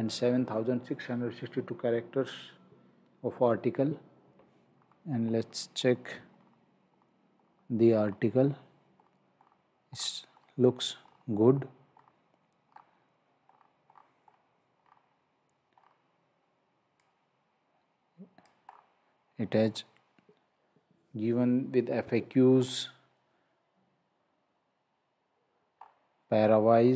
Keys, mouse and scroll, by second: 4.7 scroll down 1, 12.7-13.3 scroll up 1, 14.7 scroll down 1, 17.1 click, 18.7 scroll up 1, 19.7 scroll down 1, 22.5 scroll up 1, 25.7-26.0 scroll up 1.